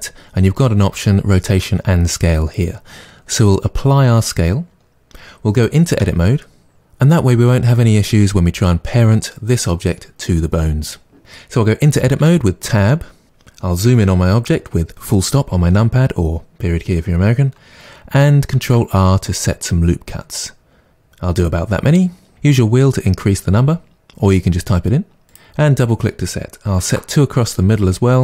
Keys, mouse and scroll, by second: 5.9 Tab, 12.1 Tab, 14.4 KP_Decimal, 18.6 ctrl+r, 25.3 click, 26.8 ctrl+r.